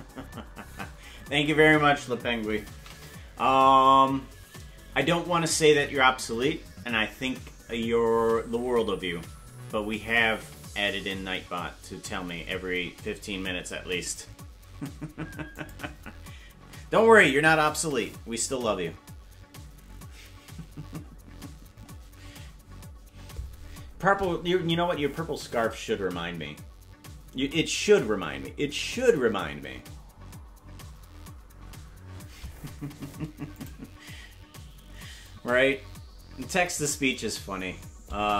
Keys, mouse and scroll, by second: 4.9 ctrl+s.